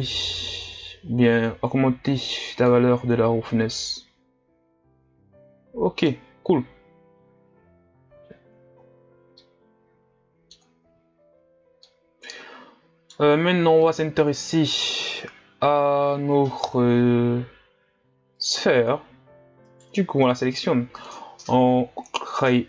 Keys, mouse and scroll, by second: 1.9-2.7 scroll up 6, 2.7-5.7 middle drag, 6.8-7.6 scroll down 2, 7.6-9.4 scroll down 1, 9.4-11.5 middle drag, 11.5-11.9 scroll down 1, 11.9-18.4 middle drag, 18.4-22.6 drag.